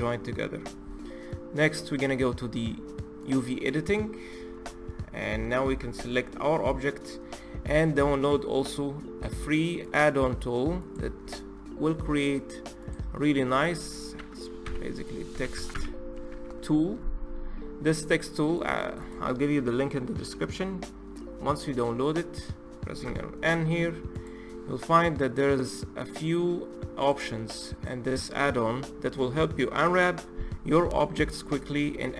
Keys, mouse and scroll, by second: 3.1 click, 4.2-4.7 scroll down 5, 4.7 middle click, 5.6 a, 10.8-12.7 drag, 22.8 n, 24.0 click, 26.9 click.